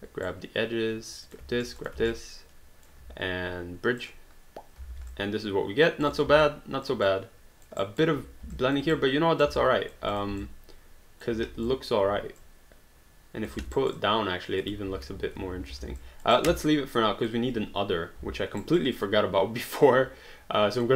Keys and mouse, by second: 1.1 click, 1.6 shift+click, 2.1 alt+click, 4.0 click, 4.9 alt+d, 5.2 alt+click, 6.0 click, 6.4 alt+click, 7.8 alt+right click, 8.5 alt+click, 8.9 right click, 10.1 click, 10.5 alt+click, 11.3 w, 11.7 alt+click, 12.4 click, 13.6 alt+d, 13.7 alt+right click, 14.9 ctrl+z, 15.5 ctrl+z, 15.8 alt+d, 16.0 alt+click, 16.4 alt+right click, 16.9 alt+click, 18.6 alt+right click, 19.0 alt+click.